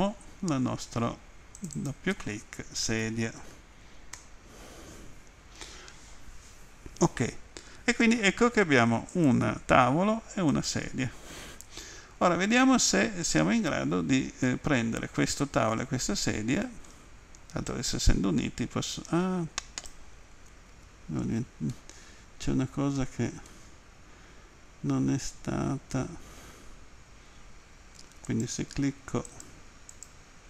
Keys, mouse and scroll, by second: 1.6 click, 1.8 click, 2.9 typing, 4.2 Return, 4.2 typing, 9.1 right click, 10.5 right click, 14.5 middle click, 17.7 click, 20.8 ctrl+z, 21.7 middle click, 23.5 middle click, 28.3 right click, 29.3 right click, 29.9 right click.